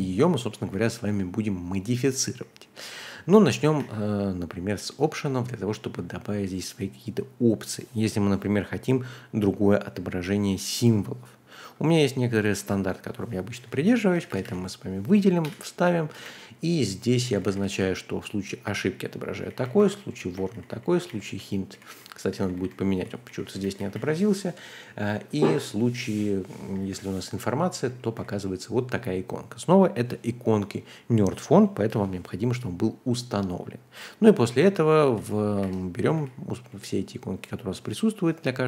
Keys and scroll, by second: 0.0-1.0 typing, 2.1-5.5 typing, 12.5 super+c, 13.6-17.7 typing, 22.0-25.3 typing, 26.4-28.1 typing, 32.9-33.2 typing, 34.5-36.6 typing.